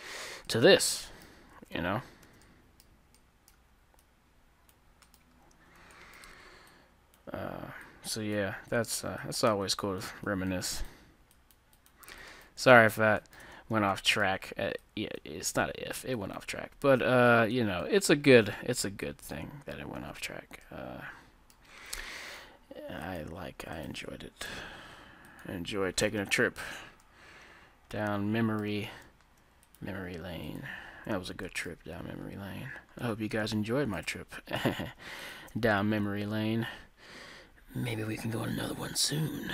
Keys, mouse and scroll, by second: 1.5 a, 1.8 Tab, 2.3 z, 4.1-6.0 drag, 5.2-7.9 middle drag, 6.8-14.2 drag, 13.2-15.8 middle drag, 14.9-20.9 drag, 18.1-21.2 middle drag, 20.0 Tab, 22.2 ctrl+Tab, 24.5 g, 26.2 Tab, 27.1-29.8 middle drag, 29.8-32.5 drag, 31.6 right click, 31.7-34.8 middle drag, 31.8 Tab, 34.0-36.9 right drag, 34.6 z, 36.0 g, 36.9-37.8 scroll up 1.